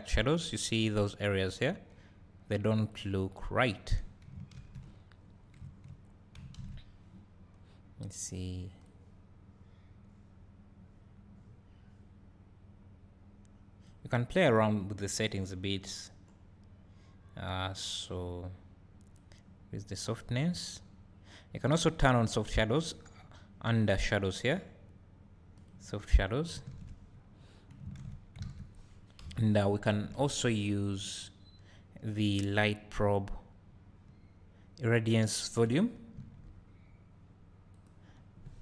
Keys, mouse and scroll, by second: 0.3 click, 2.9 click, 9.0-25.7 drag, 28.5 alt+a, 29.2 KP_7, 29.9 scroll down 1, 30.2 shift+a, 36.2 s, 37.9 click.